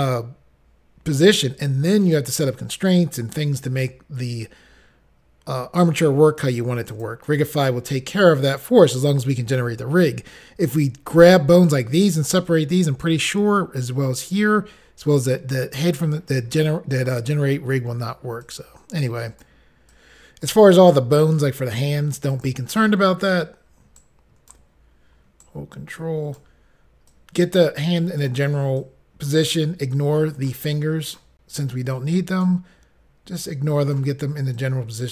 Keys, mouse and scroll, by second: 6.9 click, 7.1 click, 18.5 click, 20.0 click, 22.4 click, 22.5 click, 25.5 ctrl+right click, 27.2 click, 28.8 click, 30.0 click, 31.1 click, 31.2 click, 32.0 click, 33.4 click, 34.6 click.